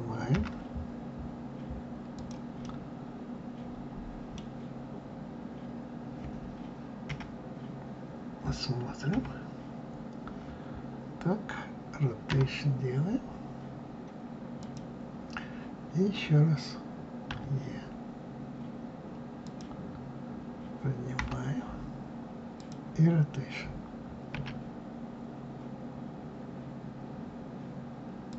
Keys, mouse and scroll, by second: 0.3 g, 2.6-5.6 middle drag, 7.0 KP_1, 9.1 KP_9, 12.3 r, 17.2 e, 21.1 g, 24.3 s.